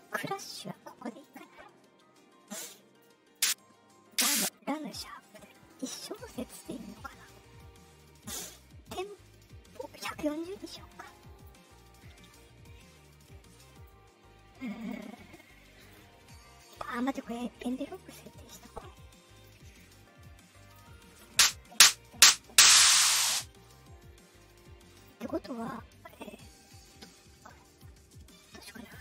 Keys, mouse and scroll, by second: 0.1 right click, 1.1 click, 3.3 click, 4.0 click, 5.2 click, 9.9-11.4 drag, 13.7 click, 14.7 click, 15.7 click, 16.5 click, 17.5 click, 18.5 click, 19.7 click, 24.9 click.